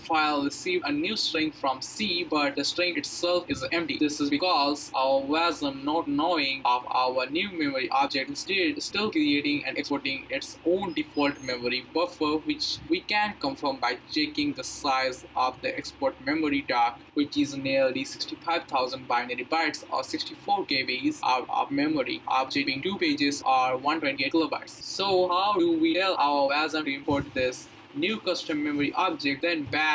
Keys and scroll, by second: 11.3 Up, 12.7 Up, 13.7 Return.